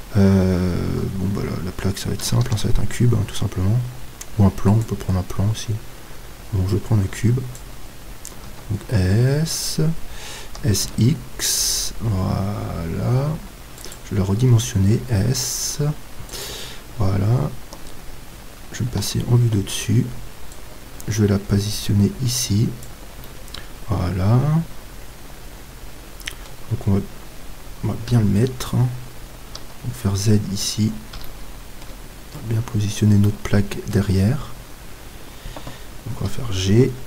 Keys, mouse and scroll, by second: 2.4 shift+a, 6.7-14.1 drag, 8.5 s, 14.4 s, 16.4-19.0 drag, 16.8-19.0 middle drag, 19.0 KP_7, 20.5-22.5 drag, 23.2-28.1 middle drag, 28.1 KP_7, 29.7 z, 31.3-35.2 middle drag, 36.2 g.